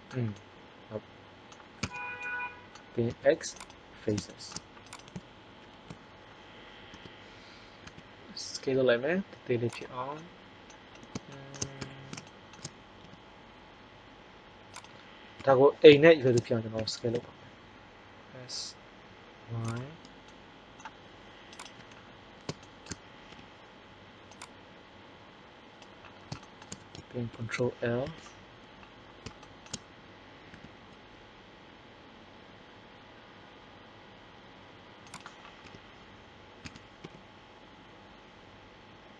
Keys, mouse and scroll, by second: 0.3 middle click, 1.0 middle click, 1.8 z, 2.2 middle click, 3.1 x, 5.6 ctrl+l, 6.8 KP_1, 7.8 s, 9.7-11.4 middle drag, 11.8 KP_1, 13.0 g, 15.4 KP_3, 16.7 s, 19.7-20.8 drag, 23.3 KP_3, 27.3 ctrl+l, 28.0 KP_1, 30.4 s, 35.2-36.7 drag, 35.6 KP_3, 36.6 s.